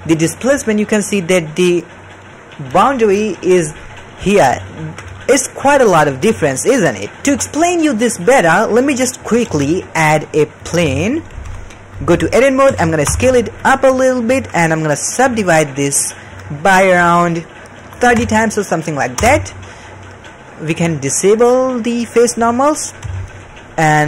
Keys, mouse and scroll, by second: 0.0 ctrl+middle click, 0.4 d, 0.6-2.5 drag, 2.5 d, 2.8 d, 4.6 ctrl+middle click, 6.3 ctrl+middle click, 8.7 middle drag, 9.3 shift+middle click, 9.5 shift+a, 11.3 g, 12.1 Tab, 12.6 s, 14.3 shift+middle click, 15.2 right click, 16.2-19.1 drag, 21.6-22.6 drag, 22.8 middle click, 23.0 Tab, 23.3 middle click.